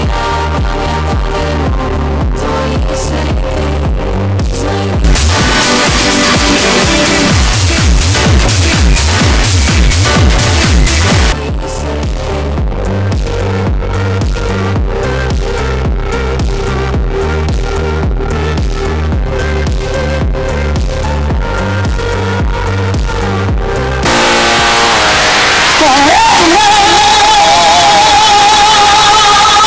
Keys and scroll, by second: 11.6 Page_Down.